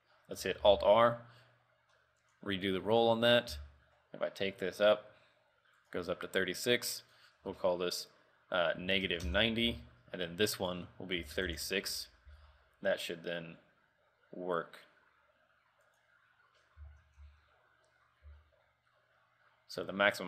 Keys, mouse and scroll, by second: 0.9 alt+r, 1.1-1.5 scroll up 4, 2.4 click, 2.7 click, 3.9 r, 7.2 ctrl+click, 10.8 ctrl+click, 10.8-11.1 scroll down 1, 11.8 ctrl+click, 12.4 r, 17.3 alt+r, 18.4 r.